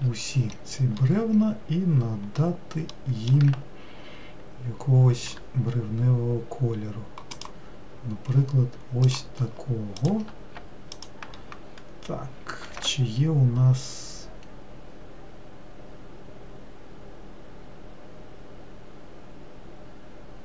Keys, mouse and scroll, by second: 0.0 ctrl+l, 5.9 g, 9.6 click, 10.6 click, 11.6 shift+click.